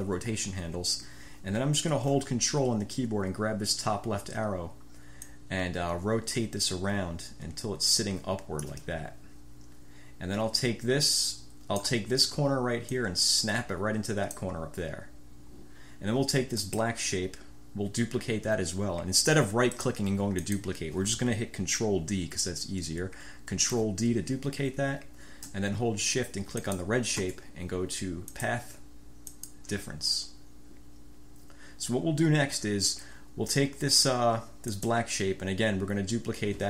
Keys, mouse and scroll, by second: 5.3-9.0 drag, 11.1 click, 11.3-12.1 scroll up 1, 13.1-14.7 scroll up 1, 16.7-17.1 scroll up 1, 19.9 click, 20.5 click, 23.9 ctrl+d, 26.7 shift+click, 28.5 click, 29.4 click, 34.9 click.